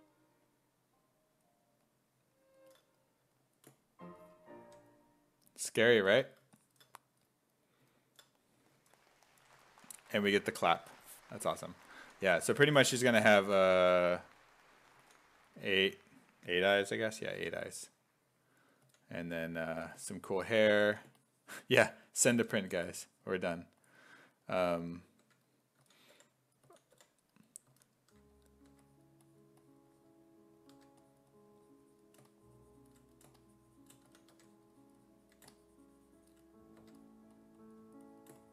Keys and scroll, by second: 4.7 1, 12.0 s, 12.5 s, 15.0 s, 16.9-19.7 typing, 20.9 s, 22.2-23.4 typing, 24.6-28.2 typing, 30.7 1, 33.9-34.8 typing, 36.8 1.